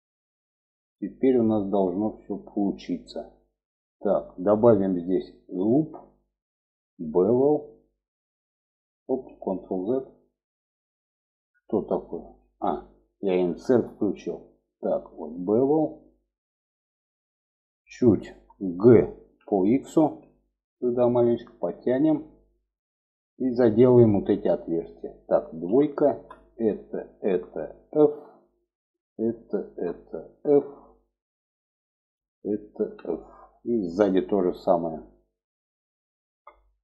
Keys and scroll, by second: 8.6 ctrl+z, 11.7 ctrl+z, 18.6 g, 25.0 2, 27.4 f, 29.8 f, 32.2 f, 36.4 f.